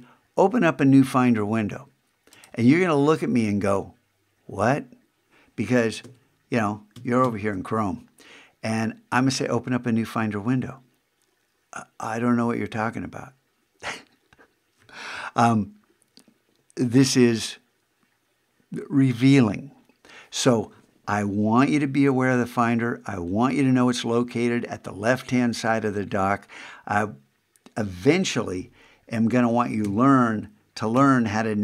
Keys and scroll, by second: 6.0 super+Tab, 29.8 super+Tab.